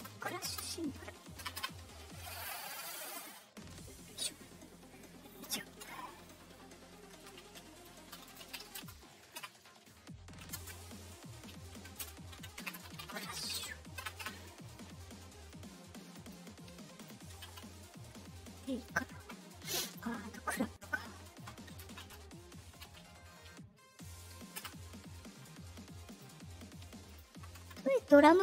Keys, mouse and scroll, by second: 0.4 space, 3.7 middle click, 3.7 scroll up 2, 6.1 middle click, 6.1 scroll up 2, 8.2-9.0 typing, 10.5 shift+space, 12.0-13.5 typing, 15.3 middle click, 15.3 scroll, 16.1 click, 16.9 click, 17.3 Return, 17.4 Return, 20.7 scroll, 26.0 click, 27.0 click, 27.6 Return.